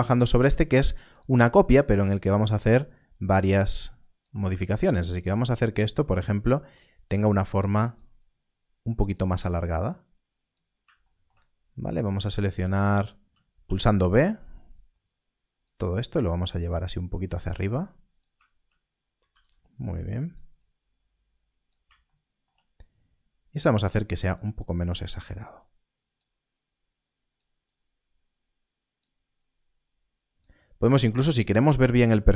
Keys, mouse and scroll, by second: 0.5 scroll, 0.9 scroll down 1, 1.9 scroll up 1, 3.1 click, 12.6 alt+a, 13.5 b, 14.3 click, 15.9 click, 16.0 g, 18.0 g, 19.2 alt+a, 19.8 click, 22.7-23.5 scroll up 1, 23.6 click.